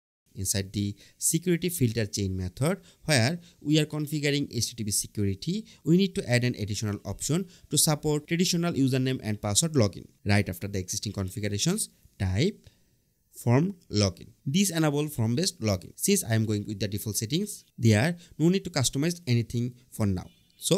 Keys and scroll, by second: 9.5 Return, 10.0 Up, 10.3 Right, 10.6 Return, 11.3 Return, 13.1 Tab.